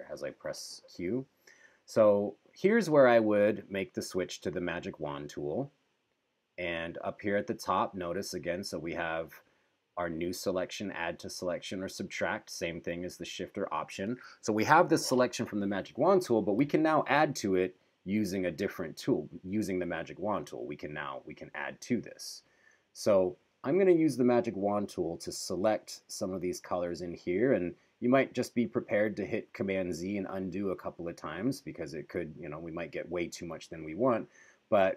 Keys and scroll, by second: 1.0 q.